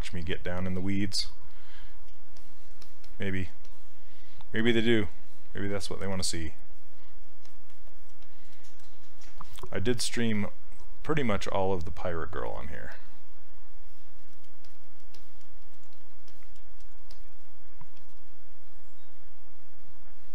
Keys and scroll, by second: 10.4 s.